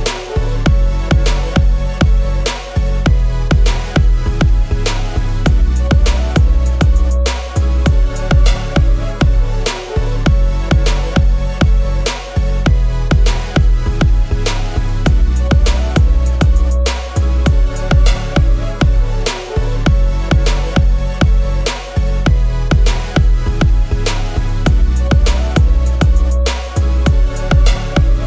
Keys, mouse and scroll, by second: 6.2 double click, 10.8 alt+Down, 10.9 alt+Down, 11.3 alt+Down, 20.9 double click, 23.7 Return, 23.7 BackSpace, 25.1 Down, 25.7 BackSpace, 26.9 Down, 27.5 BackSpace.